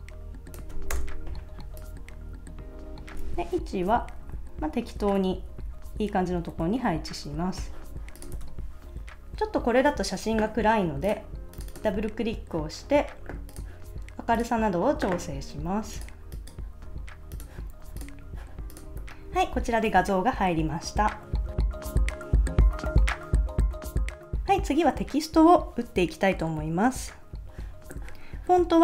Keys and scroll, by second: 0.9 shift+Return, 3.4 shift+Left, 3.9 Right, 5.0 Down, 6.1 Left, 6.6 Right, 8.4 super+s, 16.8 super+s.